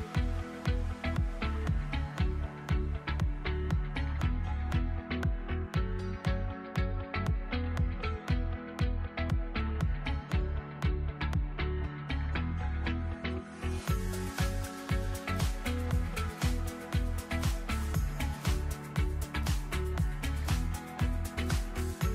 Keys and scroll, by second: 18.2 space, 18.8 ctrl+z, 20.2 space, 20.4 ctrl+z, 21.1 space.